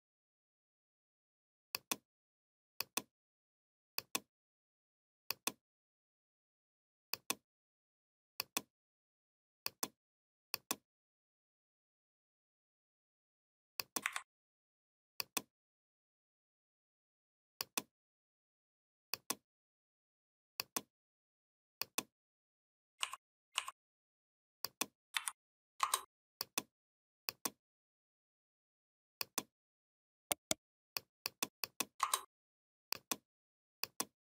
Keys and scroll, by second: 13.8 Delete, 25.0 v.